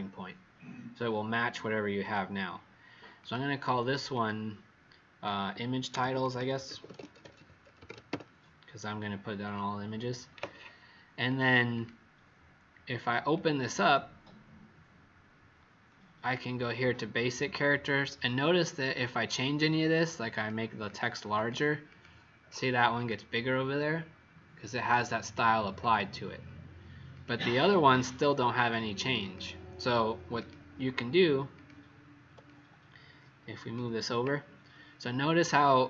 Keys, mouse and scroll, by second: 5.7-8.5 typing, 9.4 click, 11.6 click, 13.2 click, 13.7 click, 16.1 click, 20.8 click, 21.2 click, 21.8 click, 22.4 click, 25.1 click, 25.7 click, 27.0 click, 27.5 click, 28.0 click, 28.5 click, 29.1 click, 30.3 click, 32.4 click.